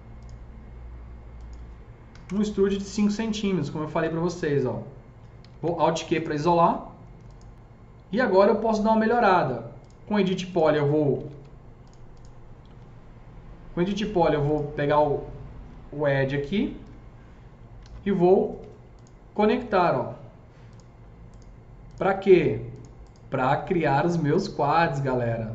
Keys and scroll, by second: 2.1 KP_5, 2.3 Return, 5.3 alt+q, 11.1 alt+c, 17.8 alt+c, 18.5 s, 19.7 F3.